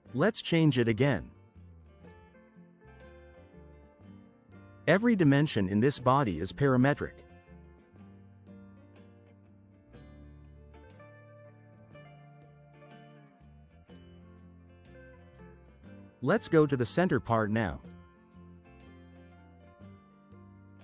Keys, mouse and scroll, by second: 0.0 click, 0.6 3, 1.0 Return, 3.3 click, 4.1-5.0 typing, 7.2 click, 7.7-8.6 typing, 10.6 click, 11.0 1, 11.5 0, 11.8 Return, 19.1 click.